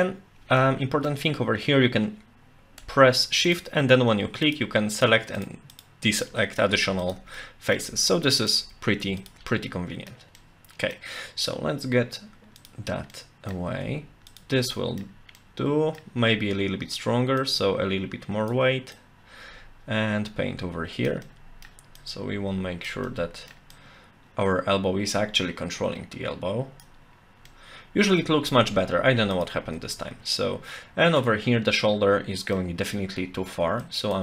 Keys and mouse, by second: 0.6 middle click, 4.4 shift+click, 4.9 shift+click, 6.2 middle click, 7.0 shift+click, 7.4 middle click, 8.4 shift+click, 9.2 shift+click, 9.5 middle click, 10.4 middle click, 12.6 click, 13.1 middle click, 14.3 shift+click, 14.7 middle click, 15.4 middle click, 17.5-18.5 drag, 18.9-21.1 drag, 21.2 middle click, 22.0 click, 23.1 middle click, 23.7-26.8 drag, 27.5 middle click, 29.3 shift+click, 29.9-31.2 middle drag, 31.8 middle click, 33.9 click.